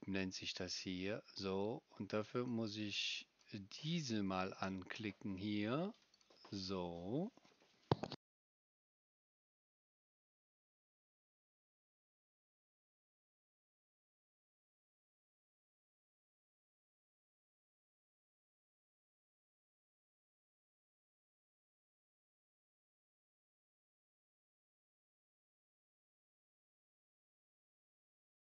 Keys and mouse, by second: 0.2-4.2 drag, 0.2-4.2 right drag, 4.2-6.2 middle drag, 6.2-28.4 right drag.